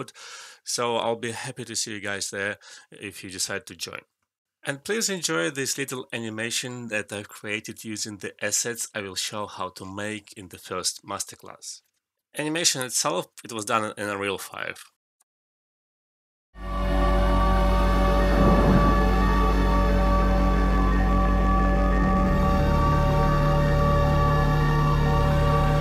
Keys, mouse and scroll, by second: 0.0-1.3 typing, 0.4 shift+click, 1.3 alt+click, 1.7 alt+right click, 1.8 alt+middle click, 1.8 click, 2.5 Num_Lock, 2.5 click, 2.6 alt+click, 2.8 alt+shift+middle click, 2.9 alt+click, 3.1 alt+right click, 3.2 alt+click, 3.4 ctrl+z, 3.8 alt+middle click, 4.0 scroll up 1, 4.2 alt+click, 4.4 alt+right click, 4.9 alt+middle click, 5.0 alt+click, 5.4 alt+right click, 5.7 alt+click, 6.0 alt+click, 6.8 alt+middle click, 6.9 alt+click, 7.0 alt+middle click, 7.1 alt+click.